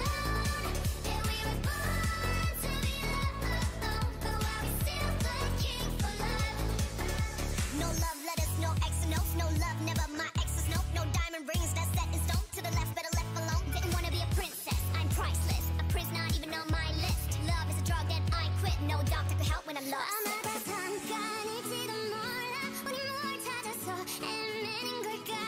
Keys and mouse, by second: 0.0-3.1 drag, 3.1 s, 3.9 ctrl+z, 4.0 s, 5.2-6.9 drag, 5.4 ctrl+z, 6.8 s, 7.8-10.2 drag, 9.6 s, 11.2 s, 11.7 a, 14.3 ctrl+Tab, 15.3 click, 16.9 x, 18.6 ctrl+Tab, 20.2 click, 20.5 g, 22.1 ctrl+r, 23.0 a, 23.4-25.2 drag, 23.9 e.